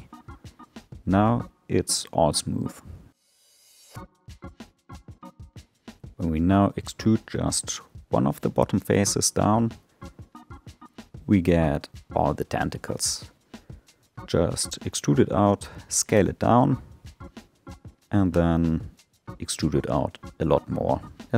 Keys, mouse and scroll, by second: 2.6 Tab, 3.4-5.2 middle drag, 5.2 3, 5.5 click, 6.2-7.3 scroll up 1, 7.3 e, 10.4 s, 15.9 alt+middle click, 16.5 alt+middle click, 17.0-17.6 scroll down 6, 18.3 e, 20.1-20.5 scroll down 2, 20.5-21.3 shift+middle drag.